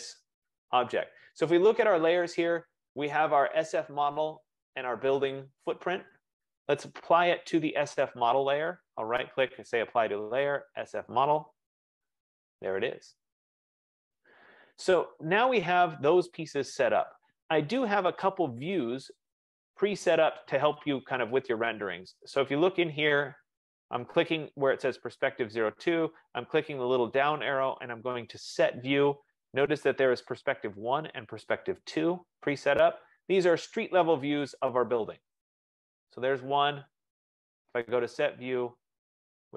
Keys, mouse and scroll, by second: 1.8 click, 8.2 right click, 11.8 click, 15.7 click, 22.3 click, 33.7 click, 34.0 F15, 37.2 click.